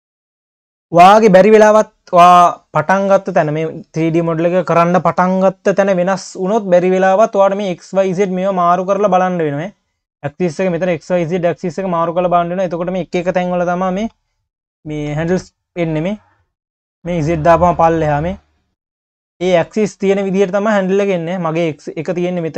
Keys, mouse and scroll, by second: 1.9-5.4 scroll down 2, 6.4-7.5 scroll up 2, 7.5 click, 8.0 click, 8.5 drag, 8.9 click, 9.2 click, 9.7 click, 11.0 click, 11.7 drag, 12.0 click, 12.8-13.4 scroll down 2, 13.4 q, 14.6 scroll up 1, 14.6 q, 16.7 click, 18.0 click, 18.4 click, 18.6 click, 19.2 click, 19.7 q, 20.9 click, 22.3 click.